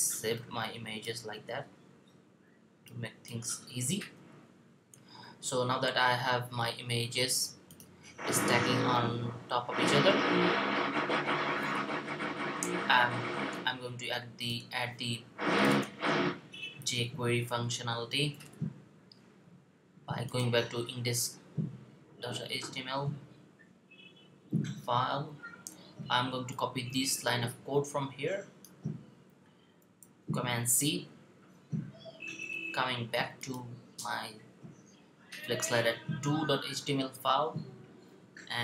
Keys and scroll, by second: 1.4 4, 3.8 5, 16.6 Left, 16.8 Left, 16.9 typing, 17.2 Left, 17.5 Left, 29.8 super+c.